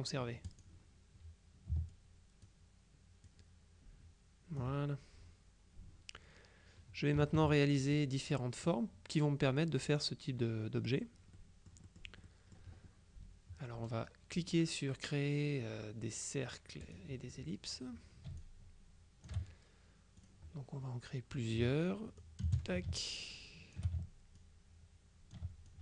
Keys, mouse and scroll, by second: 0.6 click, 2.0 ctrl+click, 3.4-5.2 drag, 7.3 KP_Subtract, 8.4 click, 11.4 middle click, 12.2 click, 16.9 click, 18.5 ctrl+shift+click, 20.3 click, 22.3-24.3 drag, 22.5 space, 24.5-25.8 drag.